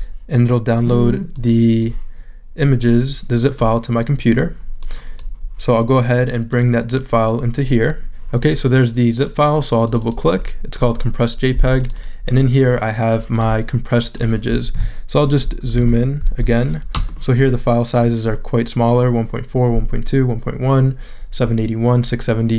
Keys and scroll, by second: 16.2 shift+super+z.